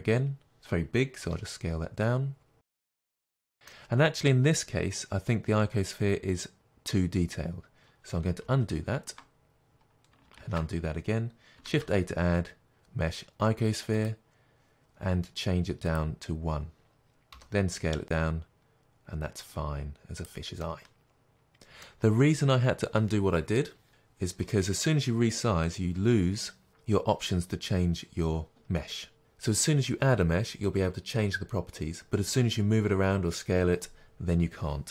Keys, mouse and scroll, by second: 1.3 s, 3.4-7.3 middle drag, 7.8 middle click, 8.5 ctrl+z, 9.7-10.3 scroll down 2, 10.5 ctrl+z, 14.1 middle click, 14.1 shift+a, 16.1 click, 17.4 s, 20.6 click, 20.7-34.9 middle drag.